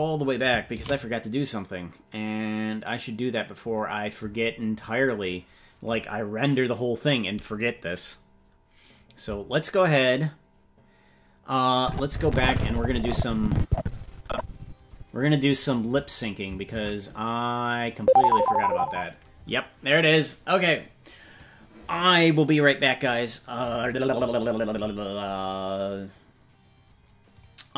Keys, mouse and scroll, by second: 3.2 ctrl+s, 4.4-6.0 scroll down 14, 11.8-15.2 drag, 16.8 ctrl+Tab, 17.9 right click.